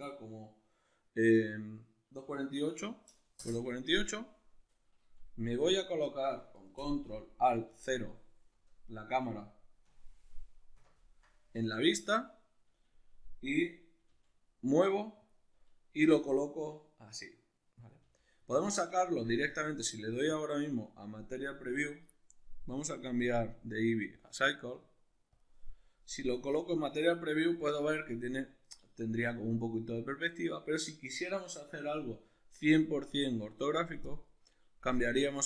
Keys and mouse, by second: 3.5 Return, 10.8 ctrl+alt+KP_0, 14.1 g, 15.3 click, 15.9 g, 17.9 click, 18.0 g, 18.5 click, 19.4 z, 22.7 click, 23.3-34.1 drag, 34.9-35.4 drag.